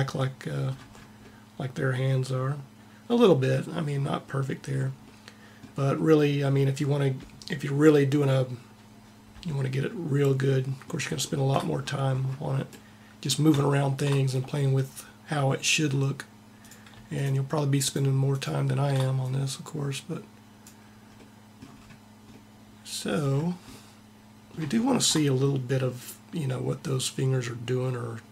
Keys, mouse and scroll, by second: 16.3 click, 18.4 click, 22.2-26.8 middle drag.